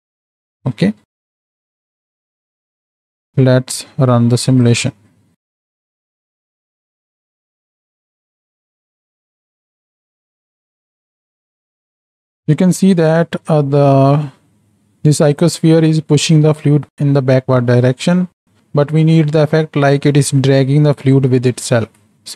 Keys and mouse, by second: 1.9 click, 4.5 click, 6.1 middle drag, 6.7-7.2 middle drag, 7.9 space, 7.9 middle click, 8.1 shift+middle click, 8.2 middle click, 8.7-12.1 drag, 13.5-15.4 drag, 18.1 middle click.